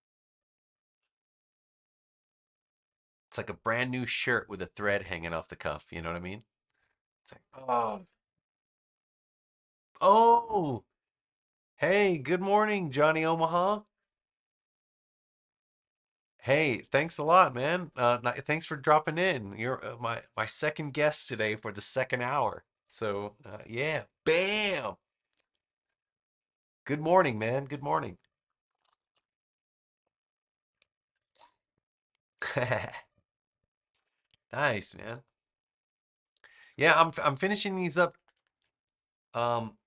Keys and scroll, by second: 37.5 super+-, 39.4 space.